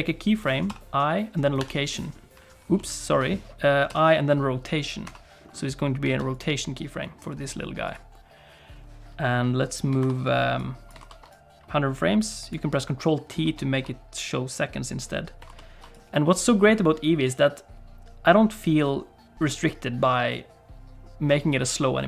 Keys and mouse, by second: 0.6 i, 2.9 ctrl+z, 3.9 i, 6.1 alt+a, 6.3 click, 7.8 click, 10.0 ctrl+t, 10.6 click, 11.0 ctrl+t, 11.3-12.5 drag, 13.4 ctrl+t, 15.4 ctrl+t, 15.9-19.7 drag.